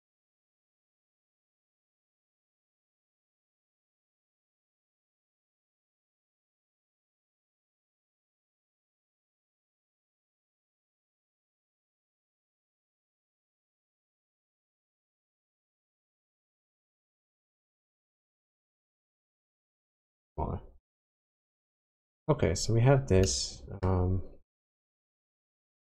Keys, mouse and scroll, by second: 4.0 shift+click, 7.4 shift+click, 12.5 shift+middle click, 13.8 shift+click, 21.0 middle click, 22.3-23.2 scroll down 6, 23.3 shift+middle click, 24.3 scroll down 1, 24.5-25.4 scroll up 7, 25.7 click.